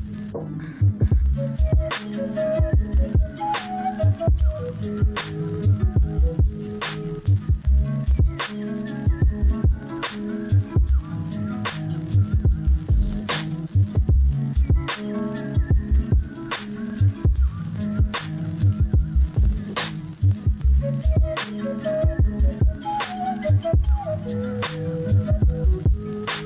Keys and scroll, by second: 0.0 ctrl+z, 1.3 ctrl+z, 2.4 ctrl+z, 3.5 ctrl+z, 4.2 ctrl+z, 5.2 ctrl+z, 6.0 ctrl+z, 6.5 ctrl+z, 8.4 ], 12.1 ctrl+z, 12.9 ctrl+z, 13.8 ctrl+z, 14.1 ctrl+z, 15.5 ctrl+z, 16.2 ctrl+z, 17.7 ctrl+z, 18.3 ctrl+z, 19.5 ctrl+z, 20.8 ctrl+z, 22.0 ctrl+z, 22.7 ctrl+z, 24.1 ctrl+z, 24.8 ctrl+z.